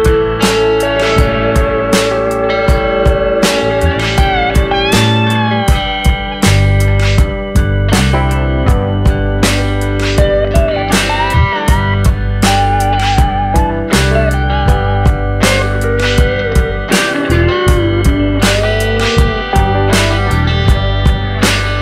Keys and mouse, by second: 1.1 middle click, 2.2 click, 2.9 click, 3.5-3.9 drag, 4.3-5.1 middle drag, 5.4 middle click, 5.8 middle click, 6.5 Tab, 7.0 a, 7.3 middle click, 7.9 shift+middle click, 8.9 click, 9.4 click, 10.3 Tab, 10.8 middle click, 11.3 middle drag, 11.7 shift+middle click, 12.0 middle drag, 12.7 shift+middle click, 14.6 middle click, 16.0 shift+middle click, 16.3 middle drag, 16.7 Tab, 17.1 middle click, 17.7 middle click, 18.3 shift+middle click, 20.7-21.8 drag.